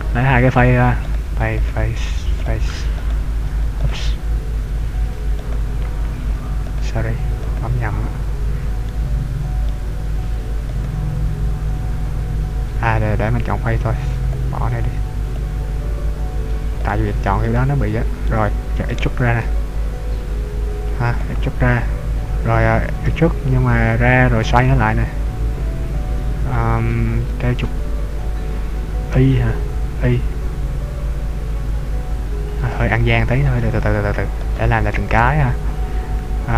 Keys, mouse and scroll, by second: 1.1 right click, 1.6 shift+right click, 2.6 right click, 3.0 shift+right click, 3.9 ctrl+right click, 5.8 shift+right click, 6.8 right click, 7.9 ctrl+right click, 8.9 middle click, 11.0 shift+right click, 14.3 shift+click, 15.3 click, 17.0 shift+right click, 17.6 shift+right click, 18.4 middle click, 19.5 e, 21.3 click, 23.5 e, 32.8 click, 33.2 ctrl+z, 34.4 right click, 35.2 shift+right click.